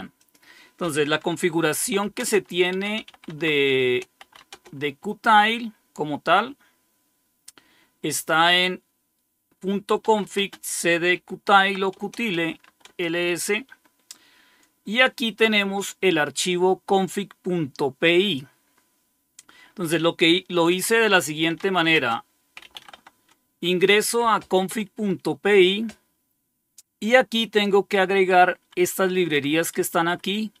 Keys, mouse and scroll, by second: 0.1 click, 1.5-4.6 typing, 3.7 Return, 8.2-8.9 typing, 9.9-13.1 typing, 16.9-18.2 drag, 18.4-19.1 typing, 18.6 click, 21.1-23.3 typing, 24.6 Return, 25.8-26.5 typing, 26.7 Down, 26.7-28.3 Down, 28.5 Down, 28.7 Down, 29.1 Down, 29.2 Down, 29.8-30.6 typing.